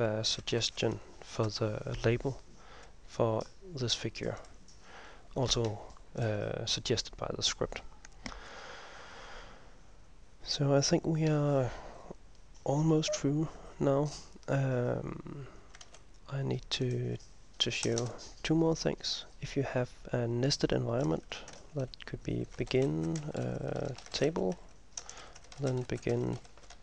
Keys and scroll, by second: 0.0-2.0 typing, 16.0 ctrl+s, 18.0 Return, 18.2 Return, 21.7-26.8 typing, 25.1 Return.